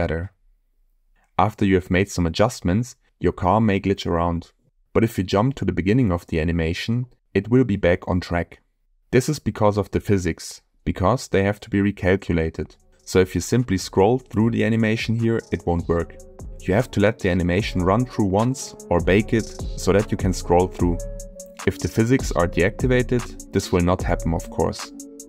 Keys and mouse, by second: 5.9 click, 13.0-16.3 drag, 16.7 click, 18.0 space.